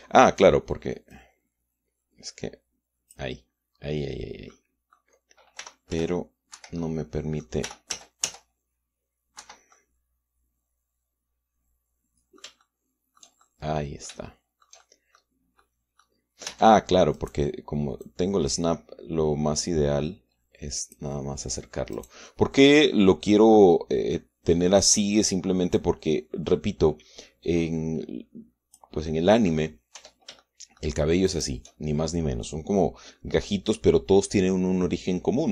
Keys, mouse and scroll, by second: 0.1 click, 0.8 shift+click, 1.9-4.1 drag, 5.3 click, 6.4 r, 6.7 z, 7.5 Escape, 7.6 click, 8.4 middle click, 8.5 r, 8.7 z, 10.2 Escape, 10.5-13.3 drag, 13.4 shift+click, 14.2 shift+click, 14.9-16.1 shift+middle drag, 16.4 middle click, 17.3 Tab, 17.9 middle click, 18.8-21.9 drag, 22.7 click, 26.5-29.7 drag, 29.8 click, 30.5 middle click, 30.7 Tab, 31.2 shift+click, 32.1 shift+right click, 32.4 shift+middle click.